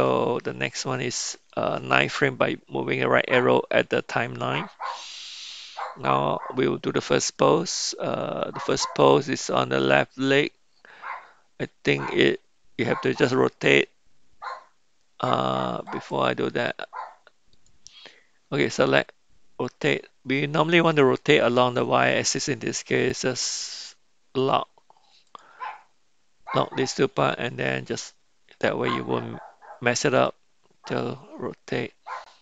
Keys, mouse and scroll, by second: 0.2 Right, 0.5 Right, 0.8 Right, 15.8 click, 17.5 click, 24.4 click, 25.2 click, 30.2 r.